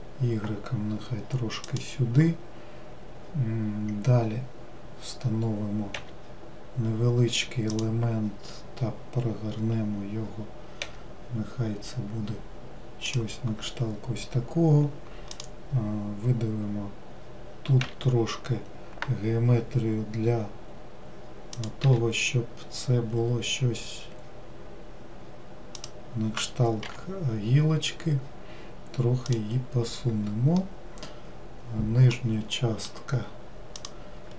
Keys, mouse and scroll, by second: 15.3 click, 30.6-33.7 middle drag, 33.7 click.